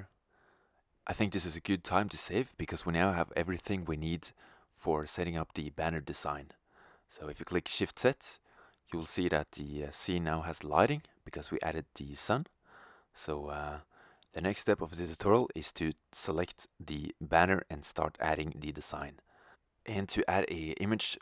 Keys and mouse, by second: 1.8-6.0 middle drag, 8.0 shift+z, 12.1 shift+z, 13.1-14.9 middle drag, 16.3-18.0 drag, 18.0-19.8 right drag.